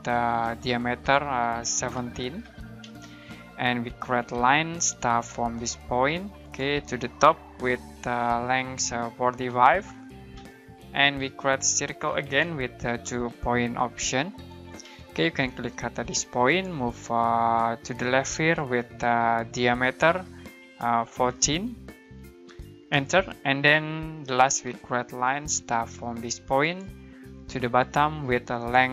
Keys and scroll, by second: 1.7-2.8 typing, 4.0-5.0 typing, 9.0-10.3 typing, 12.2-13.6 typing, 14.8 space, 21.1-22.9 typing, 24.5-25.9 typing.